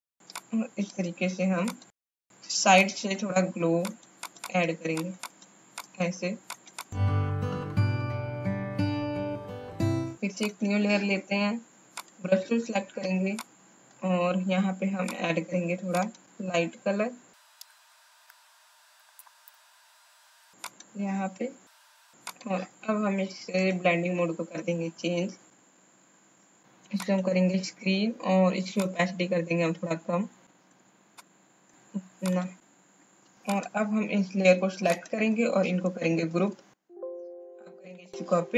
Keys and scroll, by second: 36.3 ctrl+g, 37.8 ctrl+j.